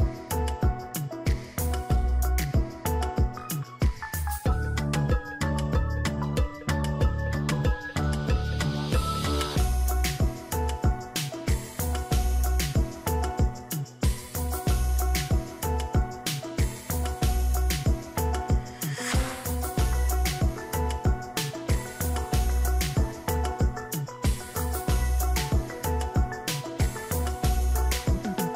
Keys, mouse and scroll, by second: 0.0-0.5 typing, 1.3 ctrl+a, 1.5 Caps_Lock, 1.6-4.2 typing, 7.4 ctrl+j, 8.4 ctrl+click, 10.4 double click, 10.6 Caps_Lock, 10.8 w, 11.8 Caps_Lock, 11.9-14.3 typing, 16.7 ctrl+a, 21.6 ctrl+d, 22.6-23.6 Down, 24.0 Down, 24.2 Down, 24.4 Down, 25.4 Down, 26.1 Down.